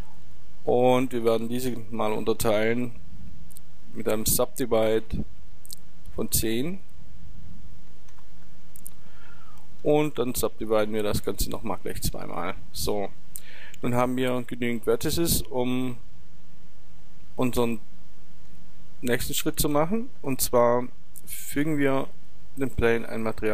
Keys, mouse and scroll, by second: 1.2 Tab, 4.4 w, 6.9-8.7 drag, 10.0 w, 11.2 w, 18.5 Tab, 21.4-23.5 drag.